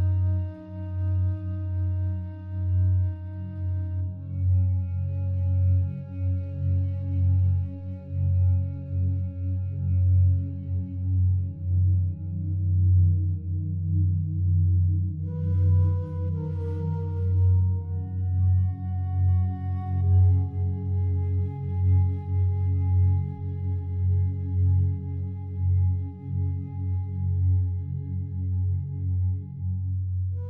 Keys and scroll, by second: 2.0 ctrl+z, 24.2 ctrl+t.